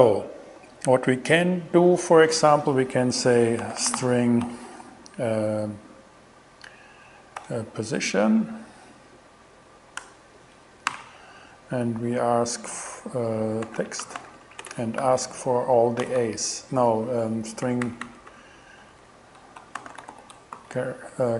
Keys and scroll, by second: 3.2-4.5 typing, 7.4 shift+p, 10.0 Return, 10.6 alt+Return, 10.9 alt+5, 13.4-15.0 typing, 16.1 shift+a, 17.5 alt+shift+Left, 18.8 alt+shift+Left, 19.6-21.1 typing.